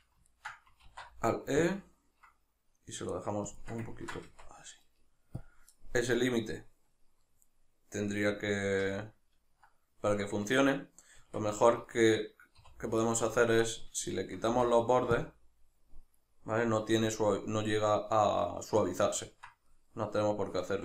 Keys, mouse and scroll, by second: 0.8 alt+e, 3.6 shift+click, 3.9-5.4 ctrl+middle drag, 4.2 Tab, 5.4 click, 7.3-13.0 middle drag, 11.2 Tab, 12.6 3, 13.0 right click, 14.1 shift+right click, 14.5 x, 16.7-20.8 middle drag.